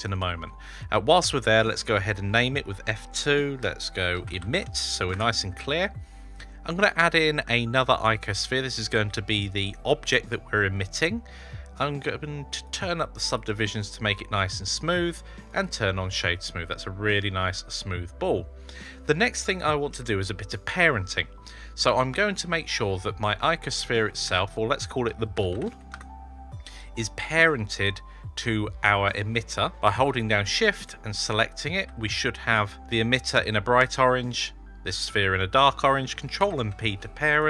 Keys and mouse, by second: 1.1 F2, 6.1 shift+a, 12.6 click, 14.9 right click, 16.3-18.0 middle drag, 24.1 F2, 25.5 l, 30.6 shift+click, 36.2 ctrl+p.